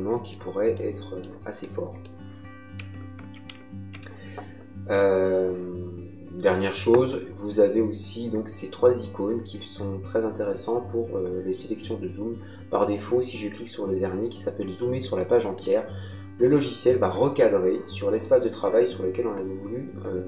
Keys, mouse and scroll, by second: 15.5 click.